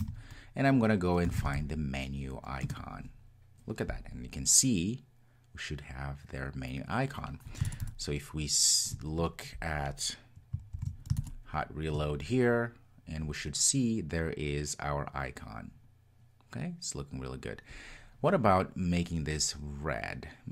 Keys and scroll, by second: 10.8 super+s.